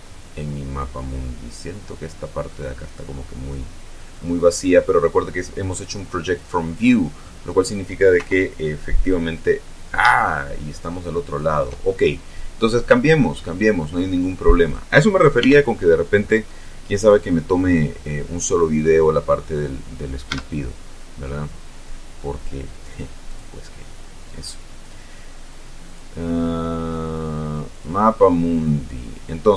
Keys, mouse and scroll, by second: 0.0-0.4 scroll down 1, 0.4-2.7 middle drag, 2.7-3.3 scroll up 1, 3.3 scroll down 2, 3.5-6.6 middle drag, 4.3 scroll down 2, 6.6 scroll down 2, 6.8-7.2 scroll up 2, 8.2 KP_0, 9.6 scroll up 2, 10.2-11.7 shift+middle drag, 13.3-15.0 drag, 15.4 t, 17.0 click, 18.8 click, 20.3 Tab, 23.2 click, 24.3-24.6 scroll up 1, 25.8 click, 27.7 click.